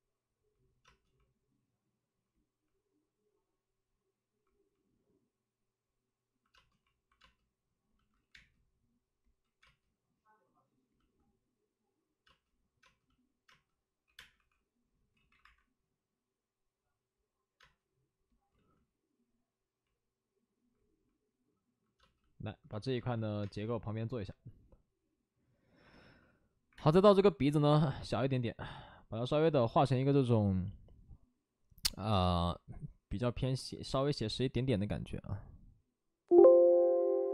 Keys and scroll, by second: 6.4 space, 7.1 space, 8.1 ctrl+z, 8.3 space, 9.4 ctrl+z, 9.5 space, 14.0 space, 14.0 2, 14.3 2, 15.0 ctrl+z, 15.3 1, 17.5 space, 18.4 ctrl+z, 21.9 space, 22.8 space, 23.1 ctrl+z, 23.3 space, 26.6 space, 26.6 1.